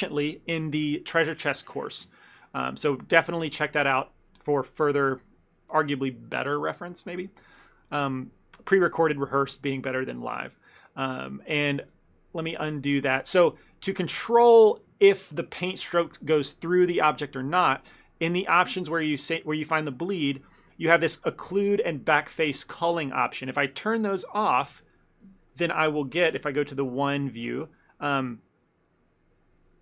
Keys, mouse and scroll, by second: 8.4 ctrl+middle click, 8.7 middle click, 10.5 ctrl+middle click, 10.8 middle click, 11.1 shift+middle click, 12.1 ctrl+z, 12.6 ctrl+z, 13.6 ctrl+z, 16.0 middle click, 18.4 click, 25.3 KP_3, 26.4 KP_1, 27.2 shift+middle click, 27.6 click, 28.1 f, 28.7 click.